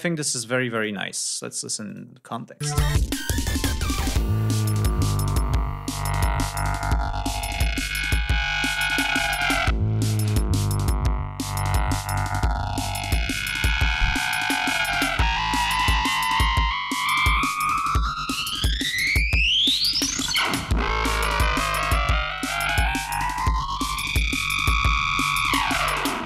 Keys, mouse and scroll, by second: 0.4 ctrl+click, 0.8 ctrl+scroll down 2, 1.6 ctrl+click, 2.3 space, 18.7 ctrl+scroll up 2, 22.0 click, 22.6-24.2 drag, 26.1 space.